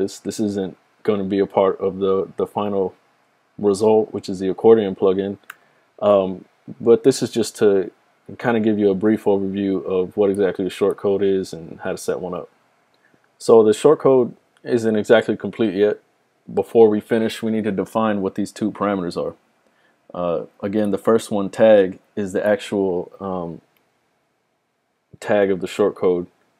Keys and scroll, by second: 8.6 typing.